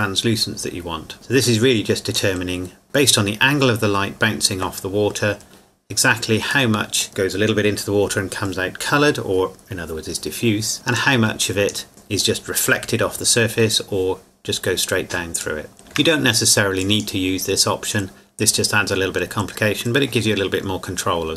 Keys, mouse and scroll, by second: 1.4 click, 6.7 middle click, 10.9 click, 15.4 click, 15.8 shift+middle click, 16.8 click.